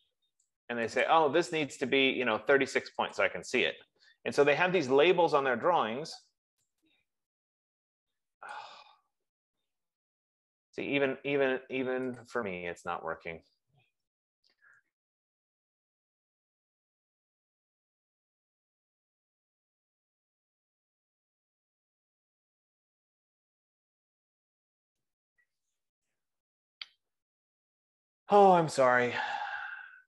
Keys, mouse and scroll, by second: 1.8 click, 3.8 click, 5.7 click, 8.7 click, 9.1 click, 10.6 click, 12.8 click, 14.8 ctrl+c.